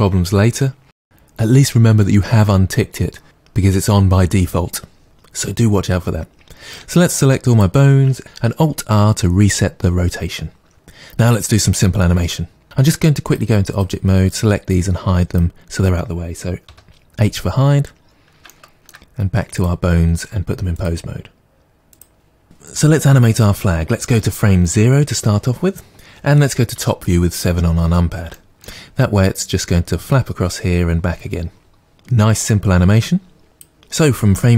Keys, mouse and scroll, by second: 12.6 ctrl+z, 12.6-18.4 drag, 16.6 h, 18.4-19.6 shift+middle drag, 19.6 click, 20.8-25.9 drag, 26.8 KP_7, 28.4-33.4 shift+middle drag, 33.4-34.5 drag.